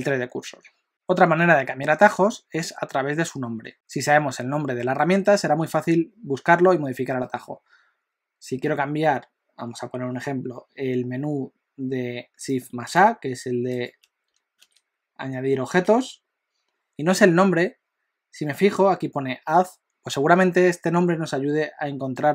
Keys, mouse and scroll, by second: 12.9 shift+right click, 14.6 shift+a, 15.9 shift+a.